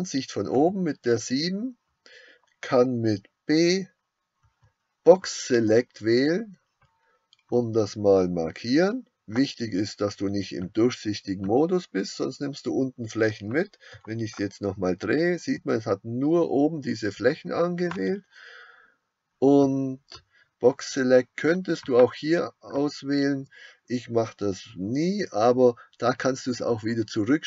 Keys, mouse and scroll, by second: 0.5 KP_7, 14.6-21.9 middle drag, 21.9-27.4 drag.